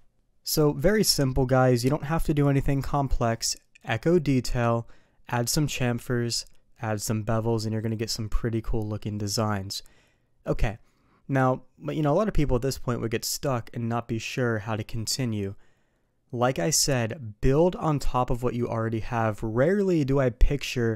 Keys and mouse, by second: 0.5 click.